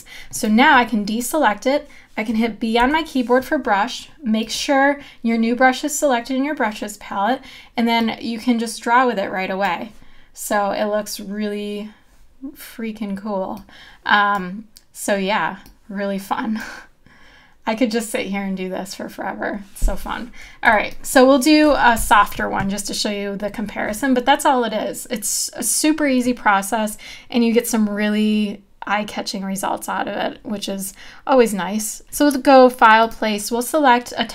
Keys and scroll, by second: 2.8 b, 20.7 v, 22.0 BackSpace.